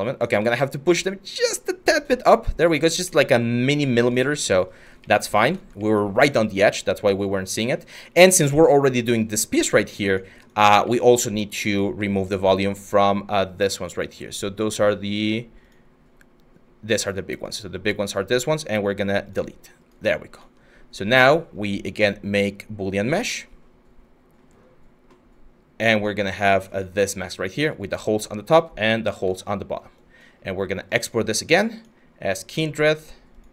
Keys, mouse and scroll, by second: 0.1 ctrl+z.